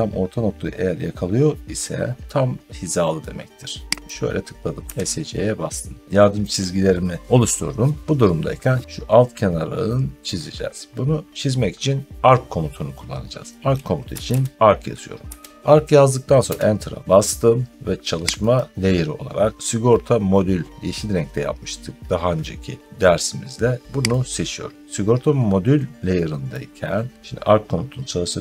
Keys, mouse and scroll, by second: 3.9 click, 4.8 Escape, 5.5 middle click, 13.7-15.2 typing, 16.3 Return, 18.4 click, 24.1 click, 27.1 middle click, 27.9 scroll up 1.